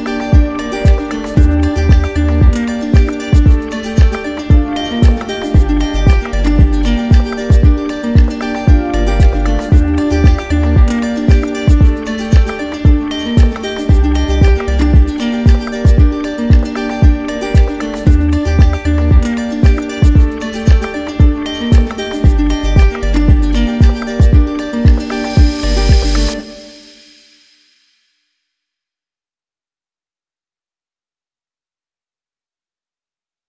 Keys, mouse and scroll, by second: 0.0 click, 1.0 right click, 2.1 click, 2.9 click, 3.4 click, 3.9 click, 4.2 click, 4.7 click, 5.2 click, 6.0 click, 7.5 click, 8.8 click, 10.7 click, 12.0 right click, 12.7 right click, 13.8 click, 15.2 right click, 16.4 click, 17.3 right click, 17.4 ctrl+z, 18.9 click, 19.5 click, 20.1 shift+click, 21.4 click, 21.7 shift+click, 22.8 shift+click, 23.3 shift+click, 24.3 right click, 24.9 right click, 25.6 right click, 26.2 shift+click, 28.0 alt+click, 29.1 right click, 29.9 click, 30.6 shift+click, 31.8 shift+click, 32.5 ctrl+z, 33.1 shift+click.